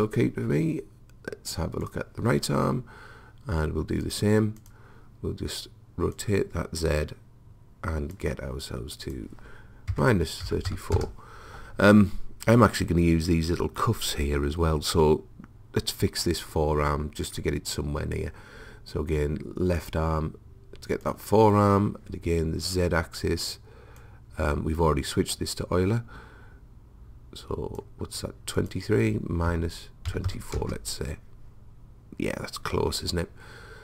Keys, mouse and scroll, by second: 1.9 click, 9.1 click, 11.0 click, 11.0-19.8 middle drag, 19.8-23.0 drag, 22.9-24.0 middle drag, 24.0 click, 25.8 middle click, 25.8 click, 26.0-28.6 middle drag, 28.6 click, 30.5-33.8 middle drag.